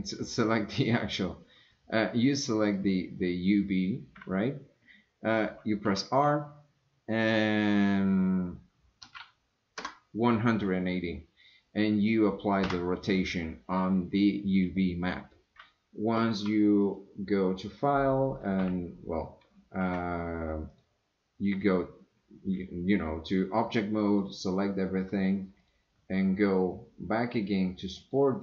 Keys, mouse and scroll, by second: 2.9-3.6 drag, 5.9 r, 16.9-18.8 drag, 19.4 Escape, 19.9 Tab, 20.7 click, 24.1 drag, 25.7-28.2 drag.